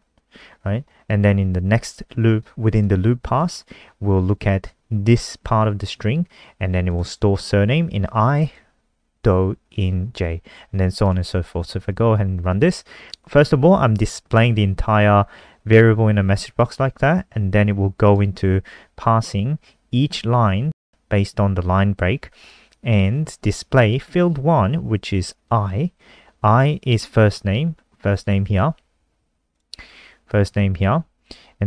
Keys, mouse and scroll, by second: 7.5 click, 8.7 click, 8.9 click, 11.5 click, 11.7 ctrl+s, 12.3 F5, 18.5 click, 28.6 click.